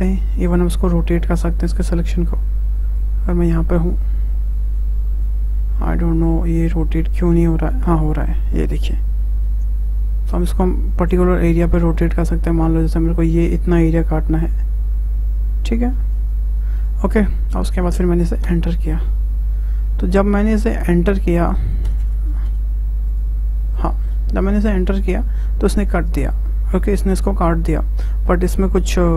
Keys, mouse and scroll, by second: 0.5 click, 3.0 click, 5.6 scroll down 2, 5.8-7.3 middle drag, 7.3 click, 16.8-18.4 middle drag, 18.4 Return, 20.1-20.5 scroll down 2, 20.5-21.9 scroll up 1, 21.9 Return, 22.0 Return, 23.1 click, 24.0-24.6 scroll up 2, 24.6-27.9 shift+middle drag, 28.5-29.1 scroll up 1.